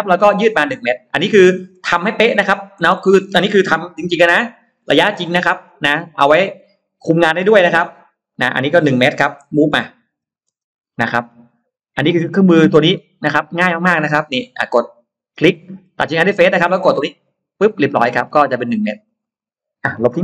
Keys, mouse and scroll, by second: 0.0 middle click, 0.2-0.5 scroll down 2, 0.7 scroll up 2, 0.8 middle click, 1.9 middle click, 4.1 Down, 4.4 click, 4.7 middle click, 5.5 click, 5.7 space, 5.8 click, 6.5 middle click, 6.9-7.7 scroll down 2, 7.6 m, 7.7 click, 9.3 1, 10.2 1, 10.4 Return, 10.4 space, 10.7-11.0 scroll up 1, 11.1 middle click, 13.9 click, 15.0 click, 17.1 click, 17.6 middle click, 18.3 space, 18.7 click, 19.2 click, 19.7 scroll down 1, 19.9 Delete.